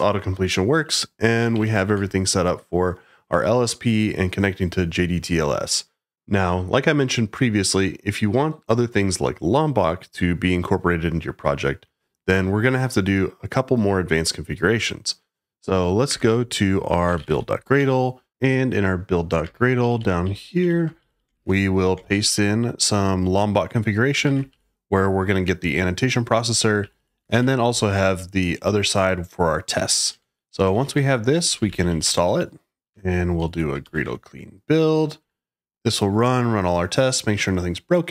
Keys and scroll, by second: 1.5 shift+9, 15.9-17.7 typing, 19.5-24.9 typing, 26.5 Escape, 26.7-28.0 typing, 30.0 Escape, 30.4-33.8 typing, 33.8 Tab, 33.9 Return.